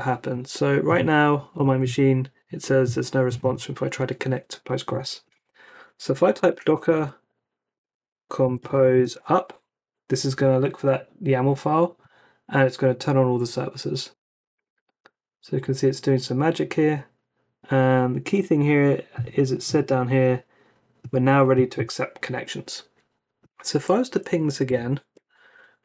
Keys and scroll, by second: 1.5 Return, 6.0-9.6 typing, 14.1 Return, 24.2 Up, 25.1 Return.